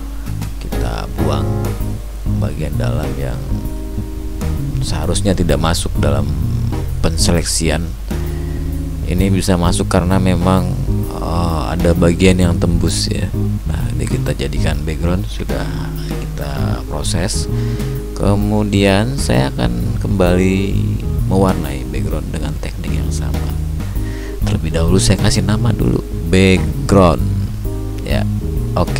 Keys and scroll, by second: 10.3 ctrl+shift+i, 12.2 ctrl+j, 13.6 ctrl+alt+z, 15.0 ctrl+shift+i, 16.1 ctrl+j.